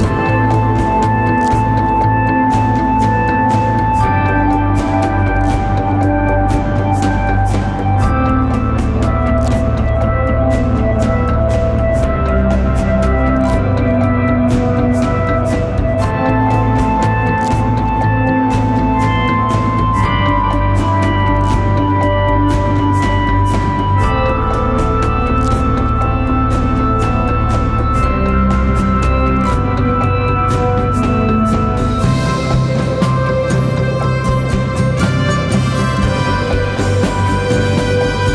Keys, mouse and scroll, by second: 14.0-14.7 typing.